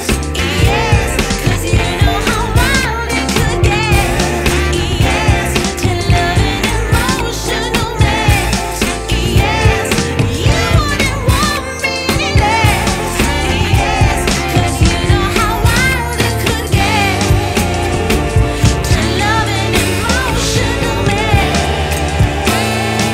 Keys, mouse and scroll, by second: 8.4 click, 11.9-14.9 drag, 15.1-18.1 drag, 18.5 click, 18.7-19.8 middle drag, 19.8-21.5 drag, 22.3 scroll up 6, 22.4 middle click.